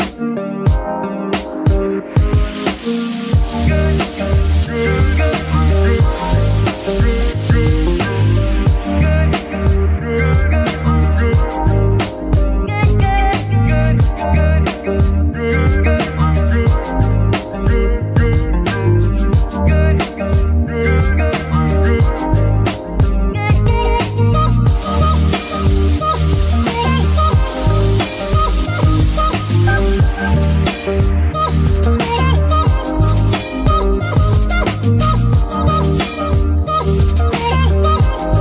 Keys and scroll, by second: 0.5 Tab, 1.0 shift+s, 4.1 shift+g, 4.3 shift+y, 25.0-25.5 typing, 25.9 Return, 29.4 KP_3, 30.6 s, 32.8 Tab, 34.6 shift+s, 35.8 z, 36.9 Tab, 37.4 shift+Tab, 37.6 shift+s.